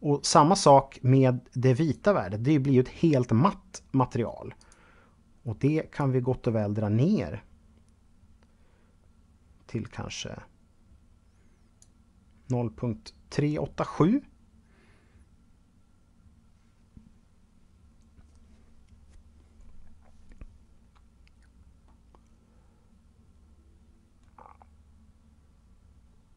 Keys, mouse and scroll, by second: 0.9 click, 3.8 click, 21.0 middle click.